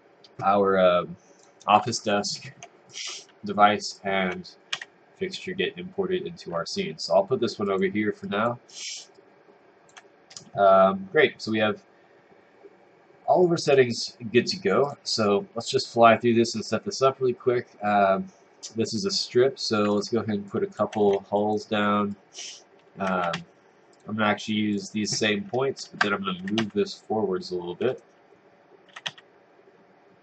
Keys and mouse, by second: 2.9 click, 4.7 w, 7.7 click, 8.2 click, 8.7 right click, 9.1 click, 15.0 click, 20.5 click, 21.4 click, 22.1 click, 23.3 s, 23.9 click, 24.7 click, 26.1-27.1 typing, 27.9 right click, 28.7-29.5 typing.